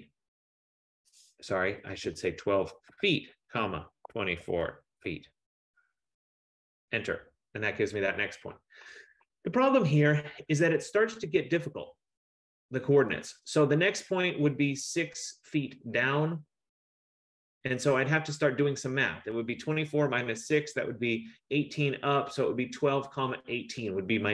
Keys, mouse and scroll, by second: 1.5-5.5 typing, 6.8 Return.